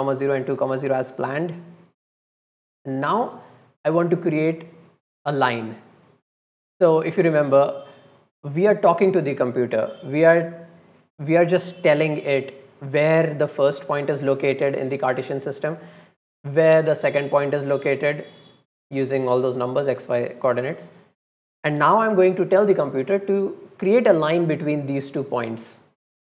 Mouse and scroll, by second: 1.4 drag, 2.0 click, 2.8 scroll down 1, 3.6-3.9 scroll down 1, 3.9 scroll up 1, 6.0 middle click, 6.7 middle click.